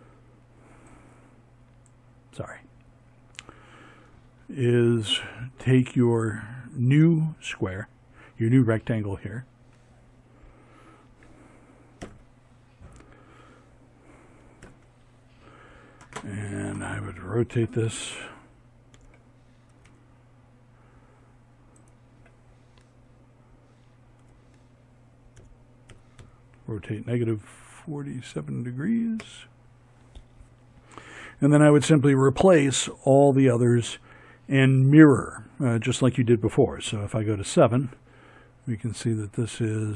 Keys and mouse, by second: 10.2 ctrl+Right, 12.7 ctrl+KP_3, 15.9 r, 22.3 r, 34.9 KP_7, 39.8 middle click.